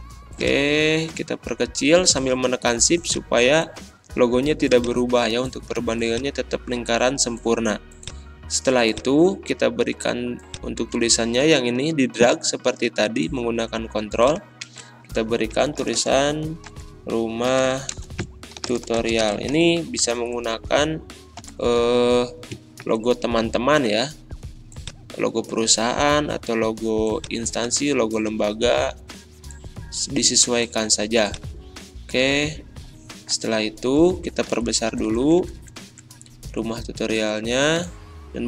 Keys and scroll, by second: 14.7 ctrl+a, 15.6-20.0 typing, 20.1 ctrl+a, 21.4 ctrl+l, 22.8 ctrl+r, 34.5 ctrl+a, 34.9 ctrl+].